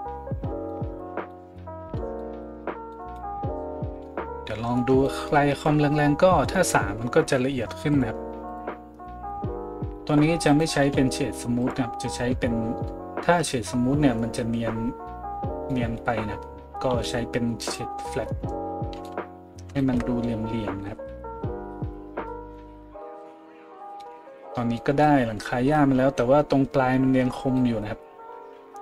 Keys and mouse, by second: 10.5 right click, 10.8 w, 16.9 w, 18.9 a.